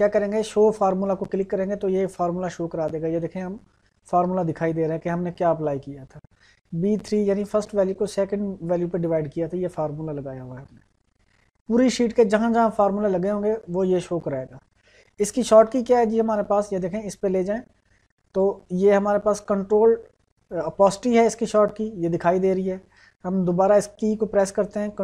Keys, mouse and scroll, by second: 1.3 click.